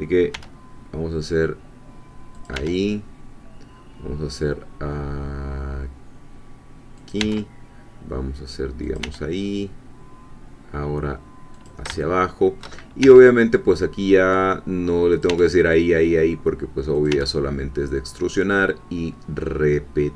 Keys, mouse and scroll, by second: 0.3 e, 2.3 click, 2.5 e, 7.0 click, 7.2 e, 8.9 click, 9.0 e, 11.5 click, 12.0 shift+middle click, 13.0 e, 15.1 click, 15.3 e, 17.0 click, 17.1 e.